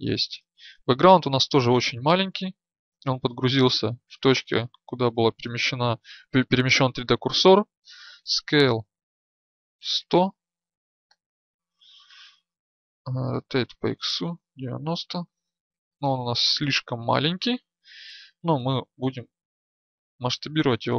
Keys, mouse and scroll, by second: 0.0-8.0 right drag, 8.0 s, 13.1 r, 20.7 s.